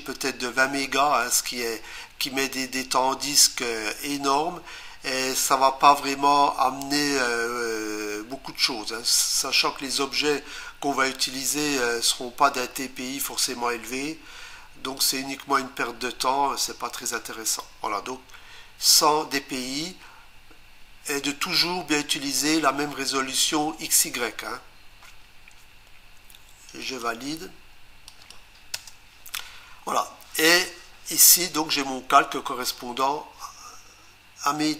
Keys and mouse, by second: 15.0 click, 26.8 click, 28.1 click, 28.8 Return.